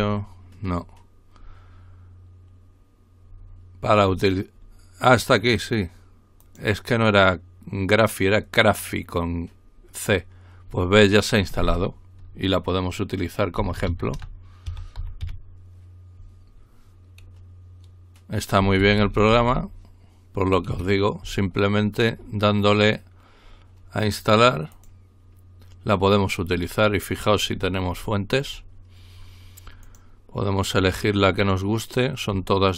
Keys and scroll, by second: 13.6-15.7 typing.